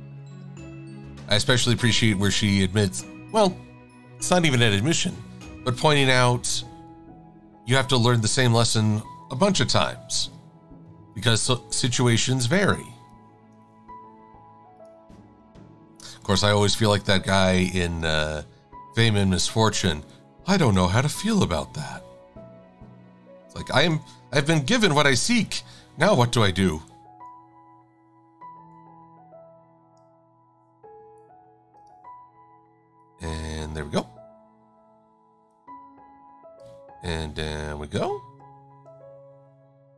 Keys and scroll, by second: 16.3 v.